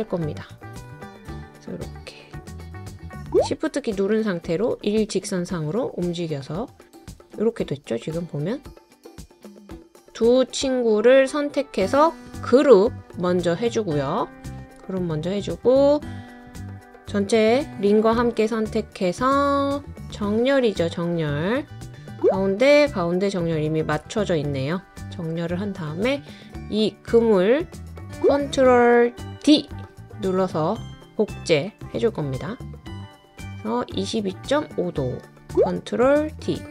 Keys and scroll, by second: 21.5 typing, 29.7 super+d, 36.3 super+d.